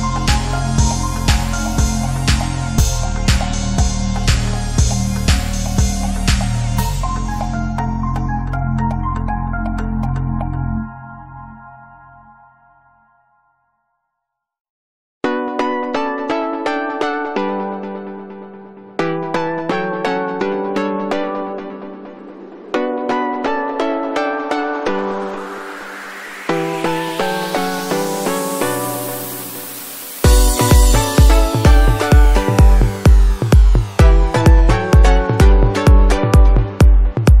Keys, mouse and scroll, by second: 0.2 click, 0.9 space, 1.4-4.5 ctrl+drag, 4.5 alt+click, 5.8 space, 5.9 click, 6.0 space, 6.6 click, 7.5 space, 7.6 click, 7.6 space, 7.9-10.2 alt+drag, 10.2 space, 10.4 alt+click, 10.7 space, 10.9 alt+click, 12.1 ctrl+z, 12.5-16.3 drag, 16.3 ctrl+d, 17.1 click, 17.9 right click, 18.4 click, 18.5 right click, 18.9 click, 19.0 right click, 19.2 click, 19.4 space, 19.7 ctrl+click, 20.5-21.9 drag, 22.4 ], 22.6 click, 23.9-26.2 typing, 24.2 click, 25.6 alt+click, 26.3 right click, 26.6-28.5 drag, 31.0 typing, 31.5-37.1 drag.